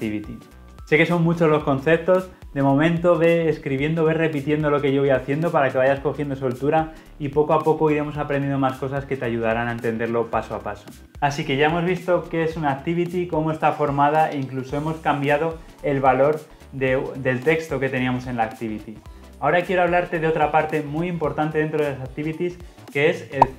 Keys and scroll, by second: 23.5 y.